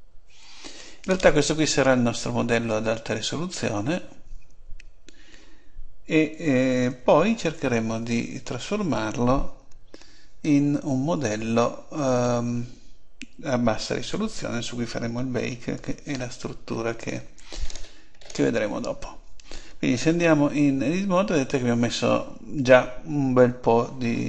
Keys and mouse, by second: 16.1 alt+g, 17.6 click, 19.7 click, 20.4 Tab.